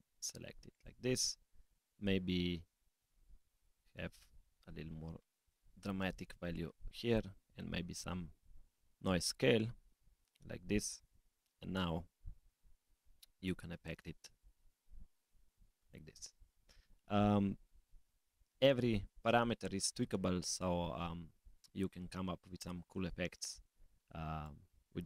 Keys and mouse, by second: 2.9-6.6 drag, 9.2-10.3 drag, 11.3 click, 11.9 s, 13.9 g, 21.4 click, 24.4 click.